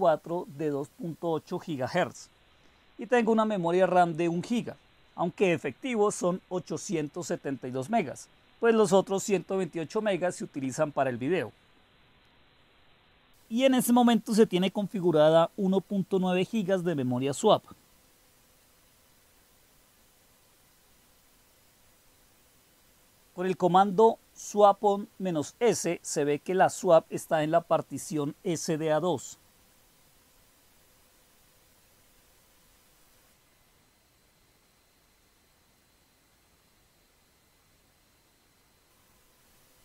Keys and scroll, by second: 0.0-0.6 typing, 13.7-18.1 typing, 19.8 typing, 22.2 Return, 29.3-30.7 typing, 32.5 Return, 33.3-34.6 typing, 39.5-39.8 typing.